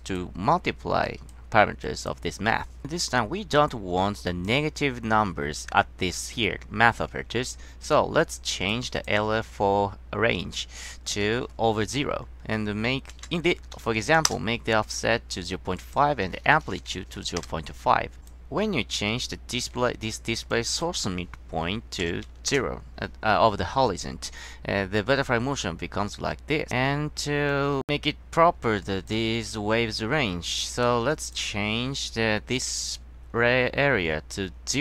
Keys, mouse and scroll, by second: 1.2 click, 2.0 click, 8.7 click, 9.1 click, 11.0 drag, 13.2 KP_0, 13.9 KP_5, 14.4 Return, 15.9 drag, 16.7 Down, 17.0 KP_1, 17.5 Return, 20.6-21.0 drag, 22.6 Return, 29.0 click, 30.6 click, 31.2 click, 31.8-32.3 scroll up 2.